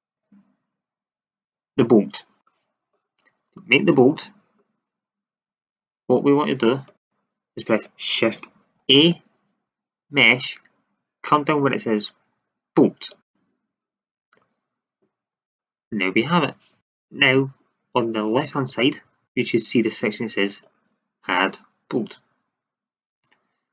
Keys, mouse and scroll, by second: 6.8-8.7 drag, 8.7 shift+a, 13.9 middle click, 14.0-17.4 drag, 19.4 click, 20.3-22.0 drag.